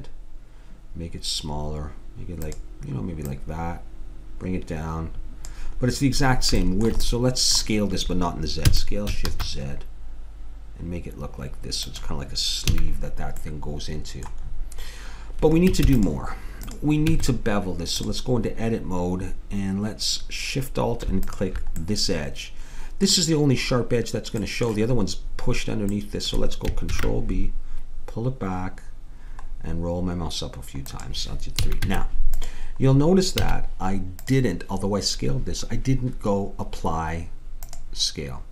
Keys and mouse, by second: 3.3-5.0 drag, 6.0-7.3 middle drag, 8.7 s, 12.7 a, 15.9 ctrl+s, 17.1 Tab, 21.2-23.0 drag, 21.9-26.0 middle drag, 26.2 middle click, 26.9 ctrl+b, 31.6 a, 31.9 Tab, 33.4 a, 34.3 click.